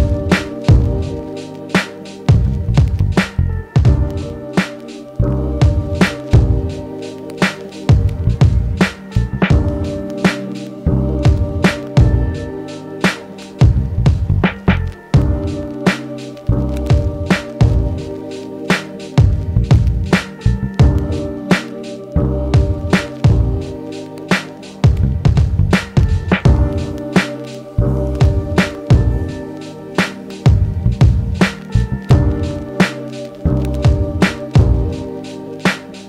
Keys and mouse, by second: 0.2 shift+a, 0.4-0.7 drag, 4.0 r, 6.2 w, 7.8-21.5 alt+drag, 11.6 r, 14.7 r, 17.9 ctrl+z, 19.0 n, 21.8 ctrl+z, 22.5-23.5 middle drag, 26.4 w, 27.0 n, 28.6-36.0 alt+drag, 34.0 r.